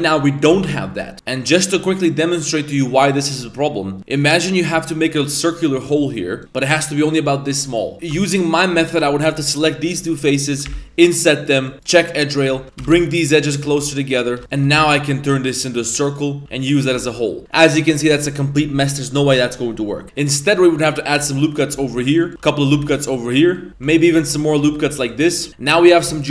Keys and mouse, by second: 0.0-0.3 middle drag, 6.4 a, 7.9 ctrl+z, 7.9 3, 8.5 shift+right click, 10.6 i, 11.7 click, 12.5 2, 12.8 g, 14.1 right click, 14.4 3, 14.5 shift+right click, 14.7 w, 16.4 e, 16.9 Tab, 17.5 middle click, 17.9 Tab, 25.5 ctrl+z, 25.5 i.